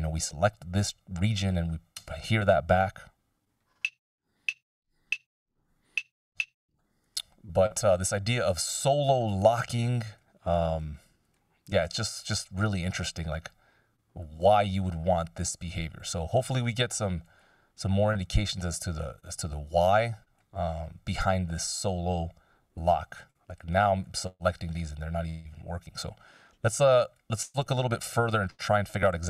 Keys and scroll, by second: 2.3 space, 6.6 space.